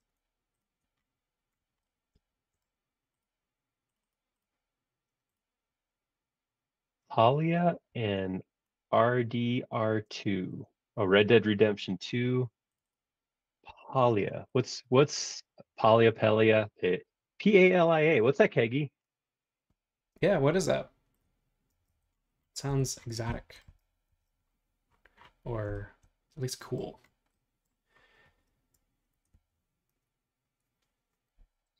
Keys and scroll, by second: 7.9 e, 10.1 space, 11.2 Escape, 13.7 e, 14.3 space, 21.7 space, 22.7 ⟲, 24.1 super+1.